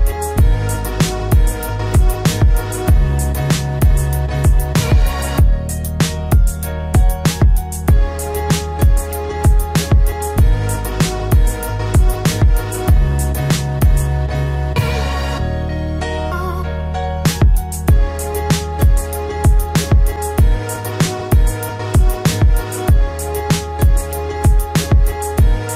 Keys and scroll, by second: 1.9 ctrl+alt+z.